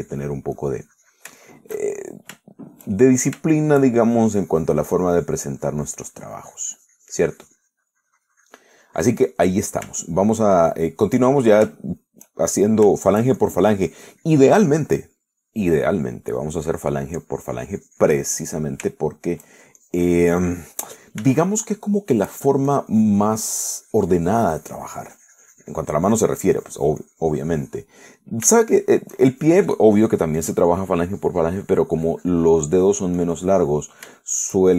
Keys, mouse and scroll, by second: 1.8 click, 2.7-3.7 shift+middle drag, 5.3-10.6 shift+drag, 10.6 middle click, 11.2 shift+middle click, 11.9 shift+middle click, 13.4 shift+middle click, 14.0 shift+middle click, 14.6-20.1 shift+drag, 19.6-20.9 middle drag, 19.9 right click, 21.0-23.0 shift+drag, 22.0-23.0 middle drag, 22.5 shift+right click, 23.2 shift+middle click, 23.9-29.3 shift+drag, 29.3 middle click, 30.1 shift+middle click, 30.6-34.7 shift+drag.